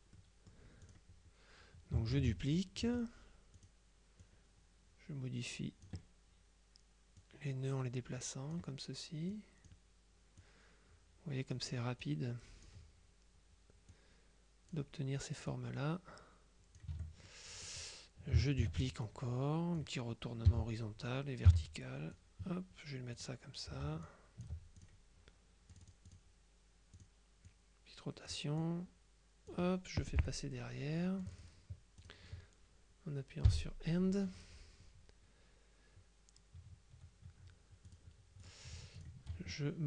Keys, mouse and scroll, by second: 0.9 click, 2.2 ctrl+d, 2.9 F2, 3.7 click, 4.3-6.4 drag, 7.3-9.1 drag, 9.4 click, 10.5-12.1 drag, 14.0 click, 15.6-17.3 drag, 17.0 F1, 18.7 ctrl+d, 19.1 ctrl+click, 20.6 h, 21.6 v, 22.2-23.7 drag, 24.1 ctrl+click, 25.8 click, 27.0 click, 28.7 click, 30.3 End, 31.3 click, 32.0 click, 33.6 End, 38.0 click, 39.0 shift+click.